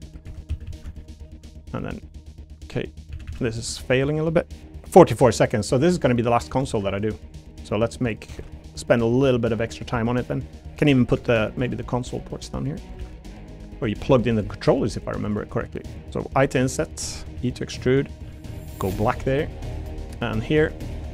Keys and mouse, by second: 0.2 2, 0.5 a, 0.6 a, 0.9 alt+shift+click, 2.0 click, 3.1 a, 3.2 a, 3.5 alt+shift+click, 4.1 click, 4.5 click, 5.9 3, 6.7 ctrl+r, 8.1 click, 8.3 ctrl+r, 9.7 click, 9.9 3, 10.9 middle click, 11.2 ctrl+r, 12.8 click, 13.0 ctrl+r, 13.9 click, 14.1 3, 14.3 click, 16.3 i, 17.2 click, 17.3 e, 17.7 click, 18.3 a, 18.5 g, 19.0 click, 19.4 middle click, 19.7 3, 20.5 click, 20.8 shift+click.